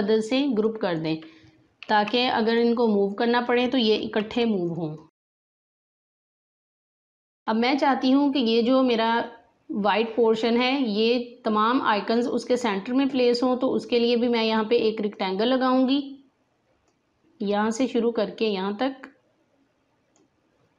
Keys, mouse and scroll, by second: 0.3 click, 1.7 ctrl+g, 2.4 click, 3.9 g, 4.6 click, 5.5 ctrl+g, 5.8 click, 6.6 alt+scroll down 2, 6.8 space, 7.0 click, 7.0 space, 13.9-20.7 drag.